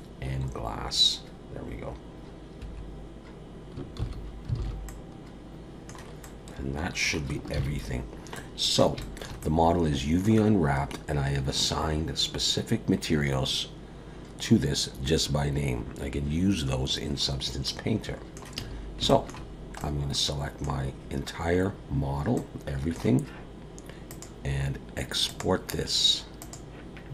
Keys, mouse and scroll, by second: 4.0 ctrl+s, 4.6 alt+a, 4.9 middle click, 6.2 middle click, 7.6 ctrl+s, 7.9-8.3 scroll down 2, 8.3 middle click, 9.0 shift+middle click, 9.4 middle click, 17.2-17.6 scroll down 1, 17.6 middle click, 18.5 a, 19.1 shift+middle click, 19.5 scroll down 1, 19.8 middle click, 22.3 middle click, 24.1 click.